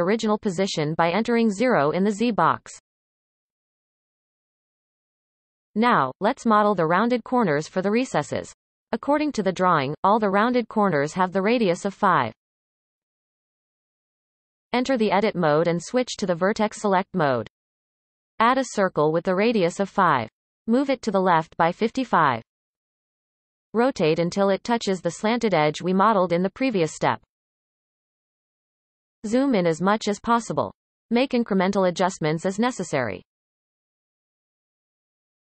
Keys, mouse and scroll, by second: 13.9 click, 14.0-15.2 scroll up 1, 15.2 shift+a, 17.2-19.3 drag, 19.3-19.7 scroll up 2, 19.7 shift+middle click, 20.6 g, 24.6-25.4 scroll up 3, 25.4-25.8 shift+middle drag, 25.8-26.7 scroll up 1, 26.7 r, 28.2-28.8 scroll up 5, 28.8 shift+middle click, 29.8 r, 31.5-32.0 scroll up 1, 32.0-32.3 shift+middle drag, 32.3-33.3 scroll up 8, 33.3-34.5 shift+middle drag, 34.5 r.